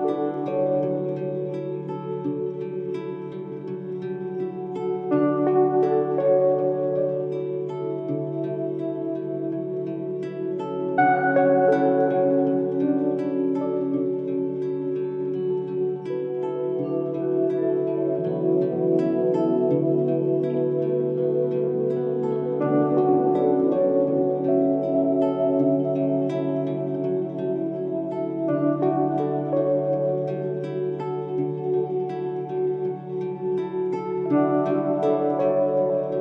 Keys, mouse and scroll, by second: 3.9 scroll down 1, 5.5 click, 7.1-7.9 scroll down 1, 8.1-12.8 drag, 17.3-22.1 drag, 31.0 click.